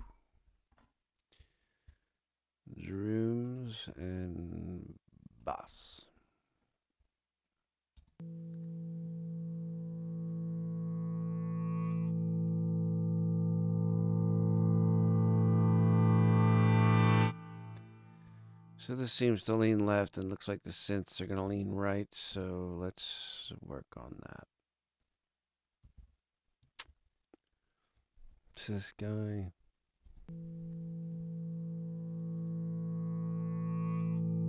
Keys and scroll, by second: 7.9 space, 22.3 space, 25.9 super+=, 30.0 space.